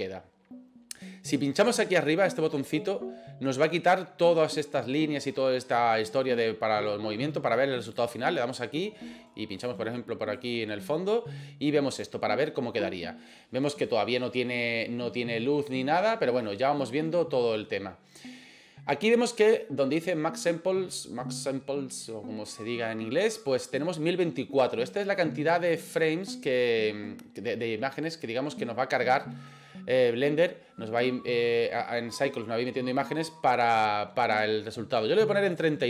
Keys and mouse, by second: 7.8 click, 10.4 right click, 35.5-35.8 drag.